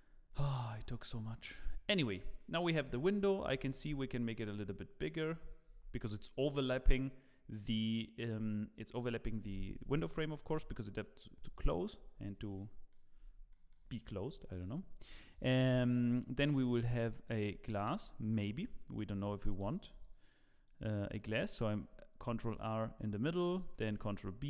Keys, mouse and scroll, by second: 0.0 scroll up 2, 0.3 middle click, 0.7-1.3 scroll down 2, 1.3 middle click, 1.8 scroll down 3, 2.1 shift+middle click, 2.7 Tab, 3.5 a, 3.7 s, 5.7 Tab, 9.9 click, 10.3 middle click, 12.5 middle click, 13.0 scroll up 4, 13.5 shift+middle click, 13.6 shift+middle click, 13.9 middle click, 14.4 shift+middle click, 14.7-15.3 scroll up 2, 15.6 Tab, 16.1 middle click, 17.5 2, 17.7 alt+click, 18.2 scroll up 1, 19.0 scroll up 1, 19.4 ctrl+r, 21.0-21.3 scroll up 2, 21.3 shift+middle click, 22.3 scroll up 1, 23.6 ctrl+b.